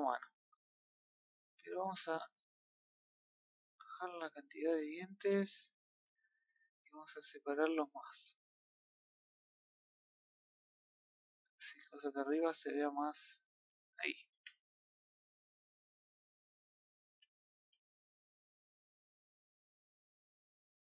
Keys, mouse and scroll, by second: 2.7-4.7 drag, 4.7-5.7 middle drag, 5.7 click, 6.9-10.0 drag, 10.0-11.9 middle drag, 11.9 scroll down 1, 12.1 middle click, 12.8-14.3 middle drag, 14.3 a, 14.5-16.4 middle drag, 16.4 scroll down 1, 16.6 scroll up 1, 16.7-17.1 middle drag, 17.1 a, 17.3 scroll down 1, 17.5 a, 17.9-18.7 middle drag, 18.7 scroll up 1, 19.3-20.8 shift+middle drag.